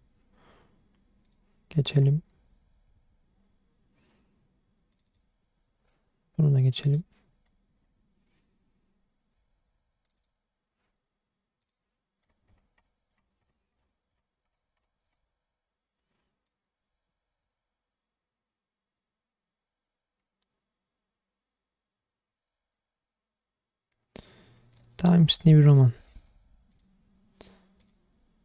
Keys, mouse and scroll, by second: 1.2 click, 6.8 click, 11.6 click.